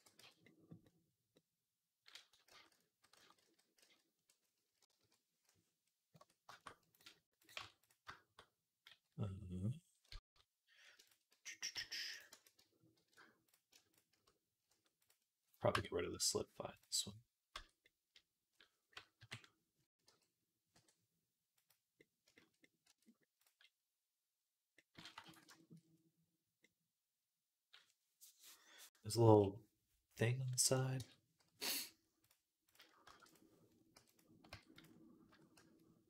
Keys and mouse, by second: 0.0 z, 0.3-1.4 drag, 2.5 ctrl+z, 3.0 ctrl+z, 3.6 ctrl+z, 4.8 KP_3, 5.7-7.3 middle drag, 6.0 Tab, 7.3 click, 7.4 Tab, 7.4-10.9 middle drag, 9.9 z, 10.9 shift+click, 11.0-13.8 middle drag, 11.1 z, 11.6 s, 12.2 a, 12.8 shift+n, 13.8 shift+click, 14.0-16.9 middle drag, 14.5 s, 15.6 Tab, 16.9-21.5 drag, 17.4 Tab, 19.0 KP_3, 19.9 g, 21.5-23.6 middle drag, 22.7 Tab, 23.2 click, 23.8 middle click, 24.2 middle click, 25.1 ctrl+s, 30.8 Tab, 32.9 shift+d, 33.8 p, 34.3 Tab, 35.1 Tab, 35.4 a.